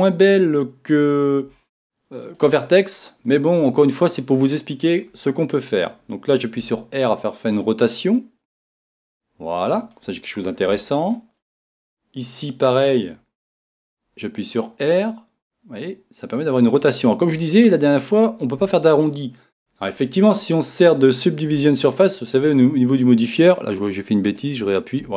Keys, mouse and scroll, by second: 0.0 middle click, 1.6-4.6 middle drag, 4.6-6.6 right drag, 6.6 r, 9.9 click, 10.8-13.3 middle drag, 13.3-14.9 right drag, 13.6 r, 16.9 click, 17.6-19.6 middle drag, 19.6 click, 21.7-25.1 middle drag, 24.5 click.